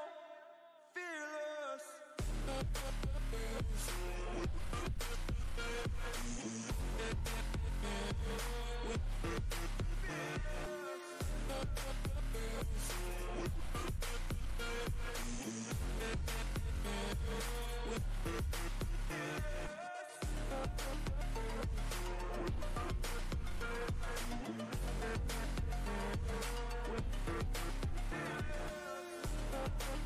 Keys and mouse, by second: 12.1 click, 29.8 click.